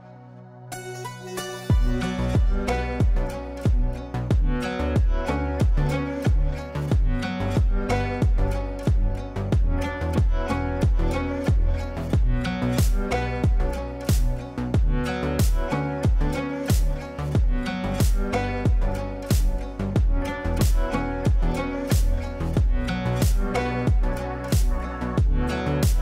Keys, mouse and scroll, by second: 3.8 alt+e, 6.3 click, 11.3-14.3 shift+drag, 14.7 F2, 15.0-21.3 drag, 21.3 space, 21.9 shift+click, 22.9 c, 23.4-26.0 drag.